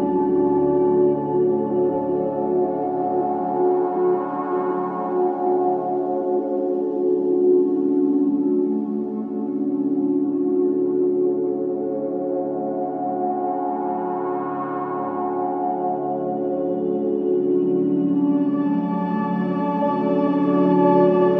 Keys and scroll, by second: 16.2 space, 19.1 space.